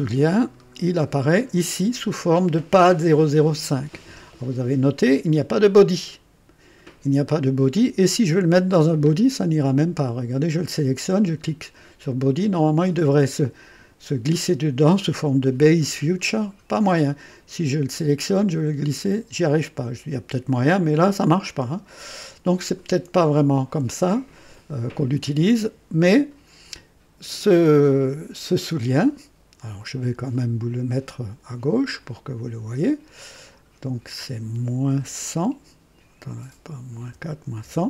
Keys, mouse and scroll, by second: 0.4-0.8 scroll down 2, 12.3 click, 17.6 click, 18.2 click, 24.3 click, 31.7 click, 32.2 click, 33.3 click, 34.9 KP_Subtract, 35.3 KP_4, 37.0 BackSpace, 37.6 KP_1.